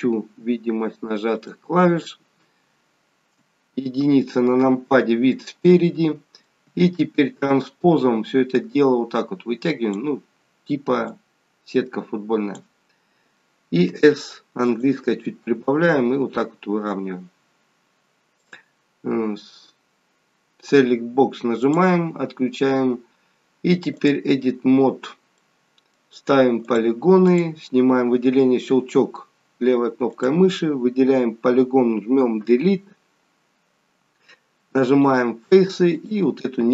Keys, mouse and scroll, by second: 2.1 n, 3.1-4.1 scroll up 1, 4.1 KP_1, 7.4 click, 8.6 click, 11.1 click, 13.9 s, 15.7 click, 18.5 click, 21.7 click, 25.4 middle click, 26.7 click, 27.3 click, 30.2 click, 32.5 Delete, 35.9 click.